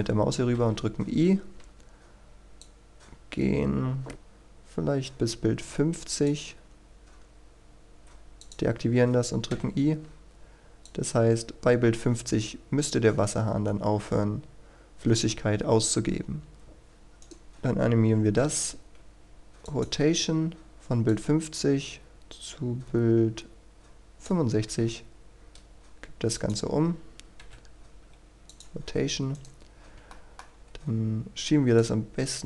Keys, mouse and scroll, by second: 0.5 i, 2.6-6.7 drag, 9.5 i, 10.9-17.1 drag, 17.2 right click, 18.3 i, 19.7-24.5 drag, 24.7 r, 26.3 ctrl+click, 28.5 click, 29.3 right click, 29.8 scroll down 1, 30.1 shift+middle click, 30.5-31.8 scroll up 1, 31.8-32.4 drag.